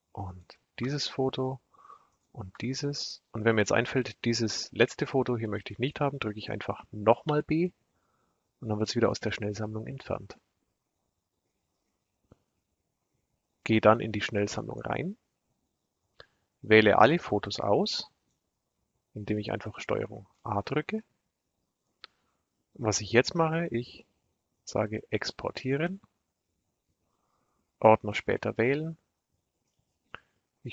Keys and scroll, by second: 6.8 b, 19.9 ctrl+a.